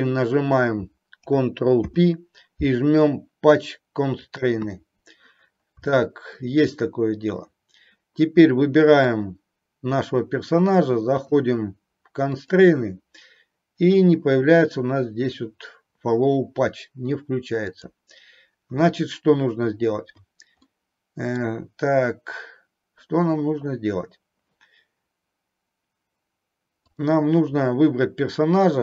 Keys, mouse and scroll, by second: 5.9-6.3 middle drag, 9.0 click, 11.0 click, 12.3-16.7 drag, 17.7 click, 20.7-21.3 middle drag, 26.8 click.